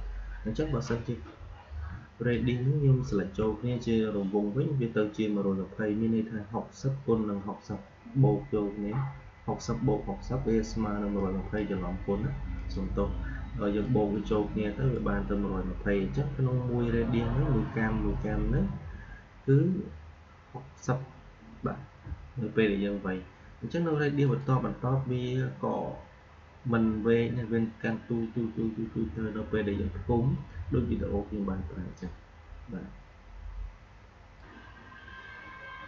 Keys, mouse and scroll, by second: 1.8 shift+Num_Lock, 2.2-5.5 shift+drag, 11.1-12.4 drag, 14.0-17.3 drag, 24.2 click, 34.3 click.